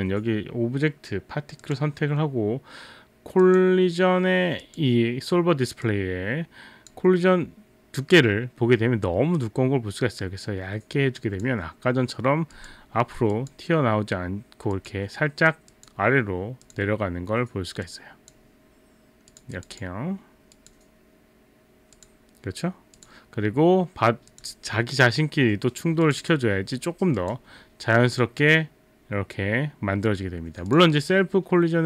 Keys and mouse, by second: 1.6 click, 3.4 click, 4.6 click, 5.9 click, 9.4 click, 12.6 click, 13.3 click, 14.8 click, 15.7 click, 16.6 click, 17.8 click, 19.4 click, 19.6 click, 19.8 click, 20.6 click, 22.0 click, 23.0 click, 24.3 click, 26.0 click, 26.2 click, 30.7 click.